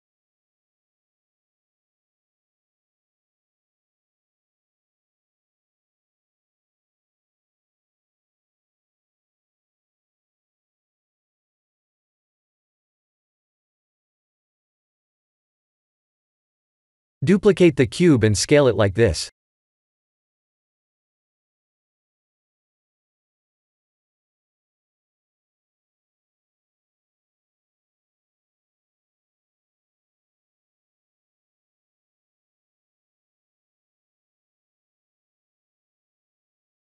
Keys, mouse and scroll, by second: 2.0 shift+middle click, 5.1 middle click, 8.9 click, 9.3 click, 10.1 click, 10.4 Tab, 11.0 KP_1, 11.8 KP_7, 14.2 shift+d, 16.8 ctrl+z, 17.3 middle click, 18.1 shift+d, 23.7 KP_7, 24.5 s, 26.6 click, 28.0 click, 31.3 middle click, 35.1 click.